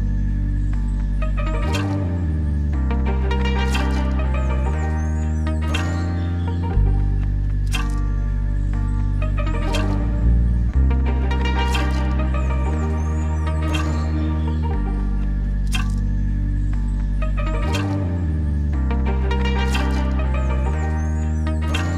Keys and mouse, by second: 3.2-4.1 drag, 5.3-6.8 drag, 10.0-13.6 drag, 14.8-15.7 drag, 17.7-18.6 drag, 19.7-21.9 drag.